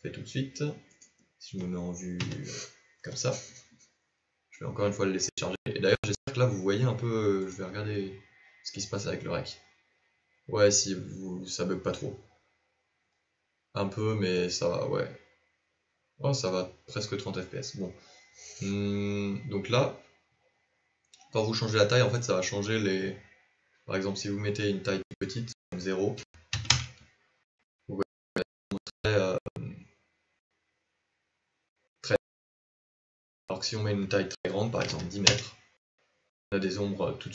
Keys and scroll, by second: 4.7 KP_0.